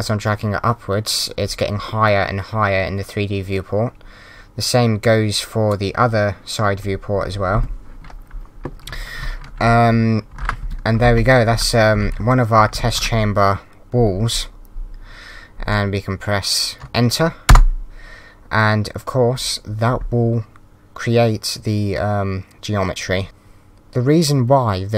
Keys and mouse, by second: 9.2-13.2 typing, 10.3 Up, 11.9 Right, 17.5 Return, 17.5 KP_Enter.